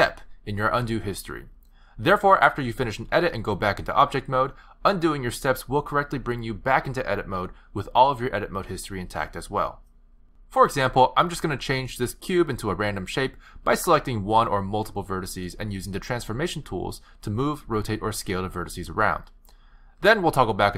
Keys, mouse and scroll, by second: 2.8 Tab, 6.7 ctrl+z, 11.1 click, 12.0 g, 13.2 click, 13.4 g, 14.1 click, 14.2 g, 15.0 click, 15.2 g, 16.2 click, 16.3 g, 17.5 shift+click, 17.7 g, 18.7 r.